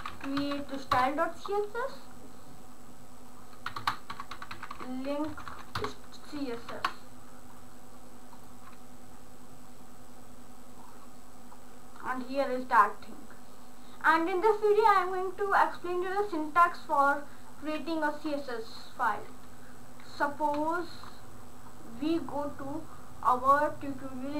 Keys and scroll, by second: 0.0-1.1 typing, 3.9 Return, 3.9-5.3 typing, 5.8 Return, 6.6 ctrl+s.